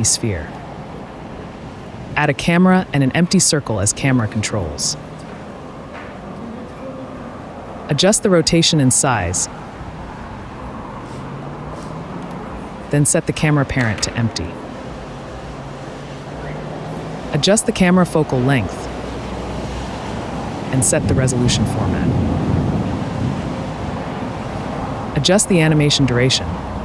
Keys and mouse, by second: 0.7 ctrl+z, 1.0-2.1 drag, 3.2-4.5 drag, 5.2-6.7 drag, 8.3 click, 10.0-10.5 drag, 11.7 click, 12.5 s, 13.6 shift+click, 14.4 ctrl+p, 15.4 click, 19.0-20.0 drag, 20.0 right click, 21.2 click, 22.6-23.9 right drag, 25.1 click.